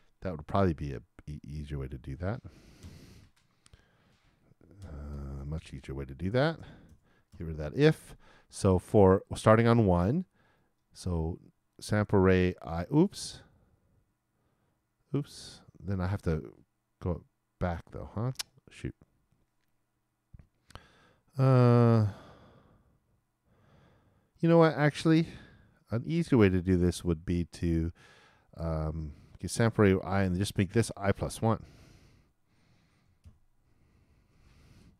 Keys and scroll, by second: 33.2 shift+=, 34.2 shift+|.